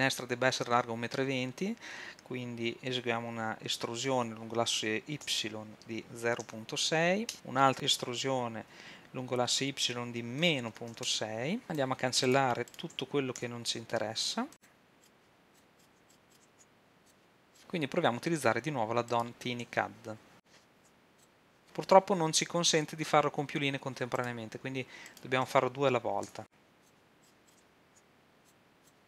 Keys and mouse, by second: 4.1 e, 7.3-10.9 drag, 7.7 e, 11.8-14.6 drag, 12.3-14.5 right drag, 13.4 x, 15.0-16.0 drag, 15.7 right click, 16.5 x, 20.8 w, 26.3 w, 27.2 click, 27.9 w.